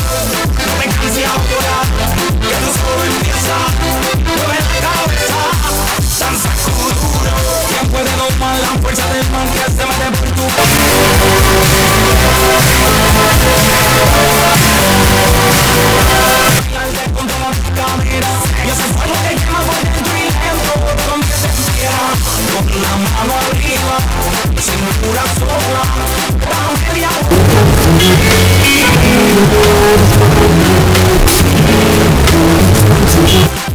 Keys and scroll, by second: 17.0 Page_Down, 33.5 Page_Down.